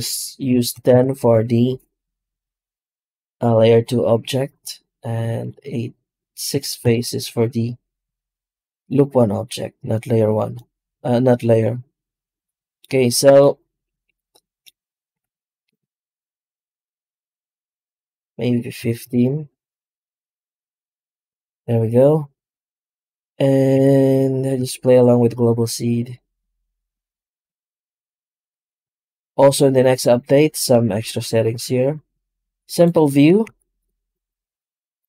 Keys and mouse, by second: 14.5 shift+middle click, 15.0 F9, 23.6 F9, 29.3 shift+q, 33.3 shift+q.